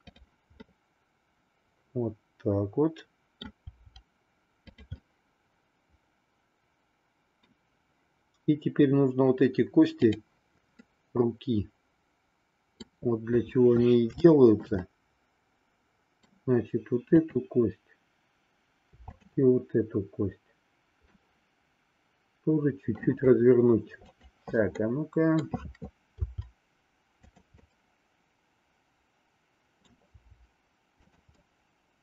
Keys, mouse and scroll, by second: 0.5-3.5 middle drag, 3.8 r, 5.0-7.5 middle drag, 10.0 click, 10.9-12.9 middle drag, 14.1 shift+middle click, 14.8-16.2 middle drag, 21.1-23.1 middle drag, 24.0 click, 24.8 middle click, 26.1 r, 27.7-30.0 middle drag, 30.1 r, 31.4-32.0 middle drag.